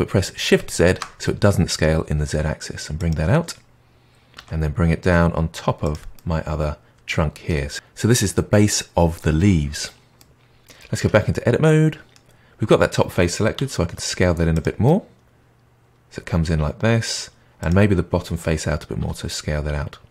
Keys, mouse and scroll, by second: 4.3 g, 6.1-7.7 middle drag, 10.1-11.0 middle drag, 11.0 Tab, 11.3-13.5 middle drag, 13.5 s, 14.8-17.6 middle drag, 17.6 click, 18.9 s.